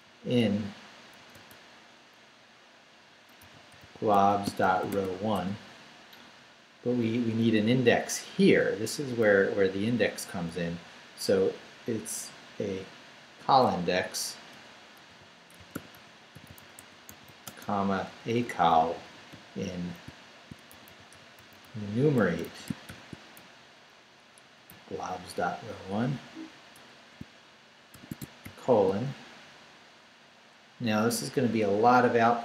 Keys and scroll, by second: 0.0 i, 1.2 n, 1.3 space, 3.2-5.8 typing, 7.4 Left, 8.4 Left, 9.4 Left, 10.2 Left, 10.6 Left, 13.9-17.8 typing, 18.0 Right, 18.8 Right, 19.3 Right, 20.1 shift+Right, 20.5-23.4 typing, 24.2 Right, 24.7 Right, 26.3 Right, 26.7 BackSpace, 27.9 shift+0, 28.4 shift+;.